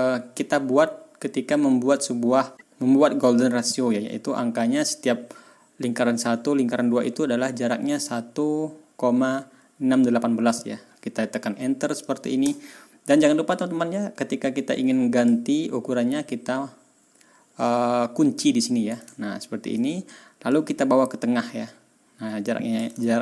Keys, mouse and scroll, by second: 12.3 Return, 15.1 click, 19.0 ctrl+scroll down 2, 19.5 ctrl+scroll up 2, 20.4-22.9 drag, 23.0-23.2 ctrl+scroll up 2.